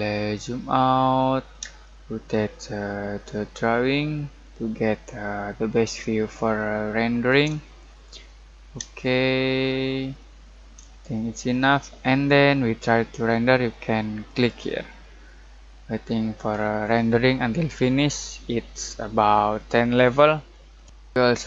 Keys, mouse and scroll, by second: 1.1-14.2 middle drag, 14.2 click.